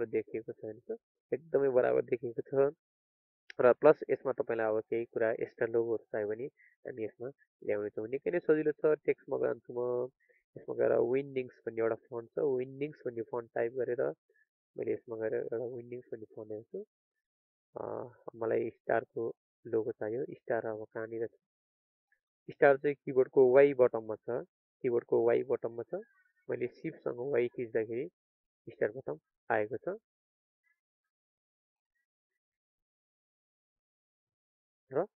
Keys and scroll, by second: 27.0 ctrl+a.